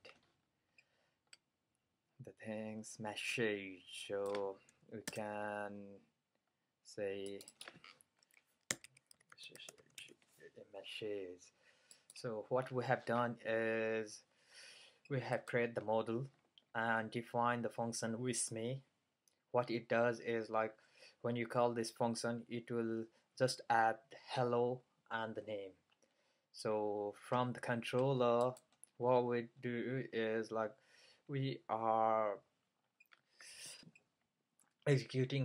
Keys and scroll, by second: 5.1 BackSpace, 8.5-10.5 typing.